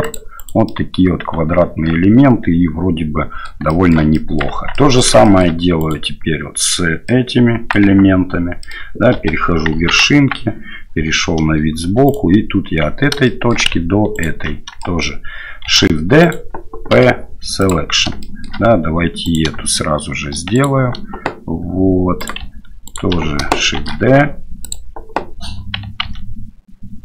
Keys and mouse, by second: 0.8-3.4 drag, 3.8 shift+click, 4.2 click, 4.5 Tab, 4.7 middle click, 5.2 shift+middle click, 5.8 right click, 7.1 middle click, 7.9 Tab, 8.6 middle click, 9.2 1, 9.7 KP_1, 10.1 KP_3, 12.1 right click, 13.2 shift+click, 14.9 shift+click, 15.7 shift+d, 16.9 p, 18.2 shift+middle click, 19.2 right click, 20.5 shift+right click, 22.2 right click, 23.8 shift+d, 26.1 ctrl+z.